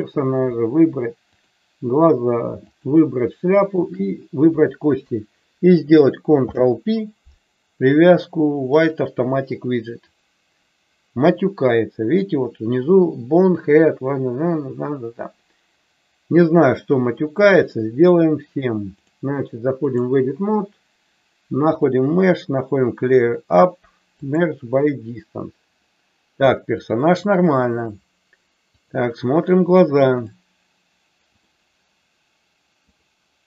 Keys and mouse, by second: 1.3 shift+click, 2.7 shift+click, 6.3 ctrl+p, 16.5 click, 18.9-19.9 drag, 21.7 click, 26.7 click, 28.8 click, 30.3-31.6 drag, 32.8-33.4 drag.